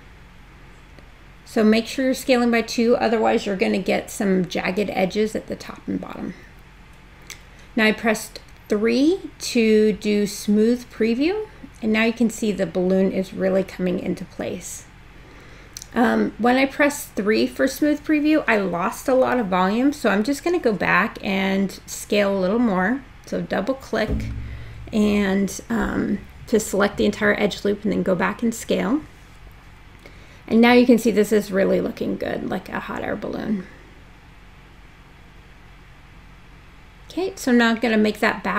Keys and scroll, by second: 5.1 3, 10.4 space, 33.9 e, 35.3 w, 38.2 r.